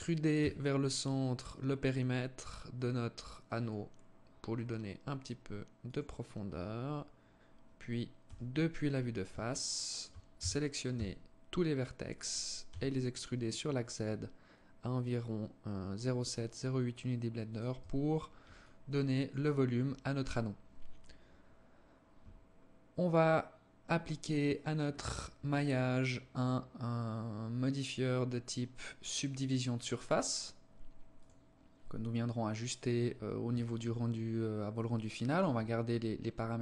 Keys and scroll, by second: 8.0 KP_1, 10.1 a, 10.7 a, 12.5 e, 17.5 Tab.